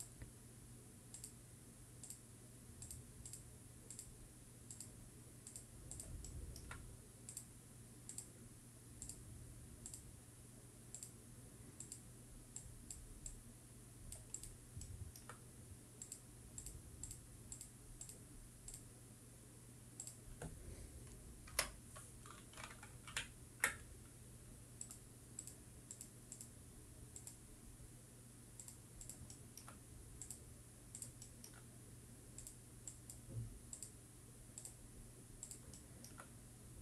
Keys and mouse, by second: 1.1-24.1 drag, 7.4 shift+middle click, 16.2 shift+middle click, 24.1 ctrl+middle click, 26.0-36.8 drag, 30.5 shift+middle click.